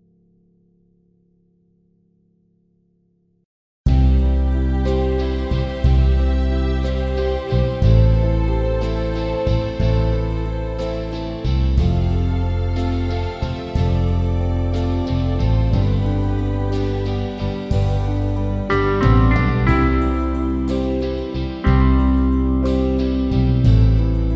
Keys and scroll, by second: 9.1 shift+g, 9.3 shift+a, 10.2 shift+m, 10.5 shift+e, 21.9 Return, 22.8 Down.